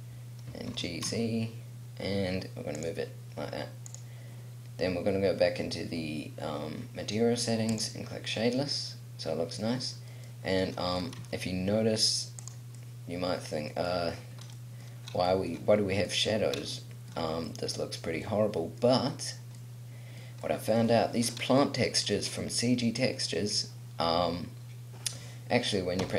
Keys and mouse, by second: 0.9 g, 3.0-7.2 drag, 7.9 click, 8.5 middle click, 8.9 middle click, 9.2 middle click, 11.1 r, 12.6 click, 13.1 middle click, 14.0 middle click, 14.2 click, 14.3 middle click, 14.7 middle click, 17.8-19.0 middle drag, 26.1 p.